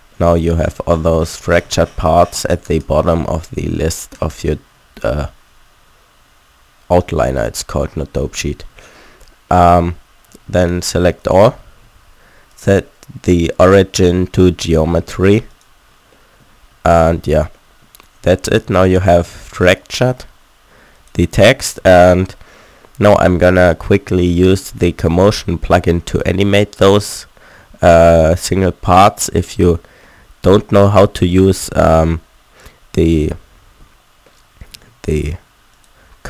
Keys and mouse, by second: 5.1-7.9 middle drag, 10.3 a, 10.5 a, 11.6 a, 11.8 a, 14.9 a, 16.8 a, 17.0 a, 18.6 a, 20.9 click, 21.7 a, 21.9 a, 23.2 middle click, 23.2 a, 31.8-33.3 middle drag, 33.9 middle click, 35.8-36.2 middle drag.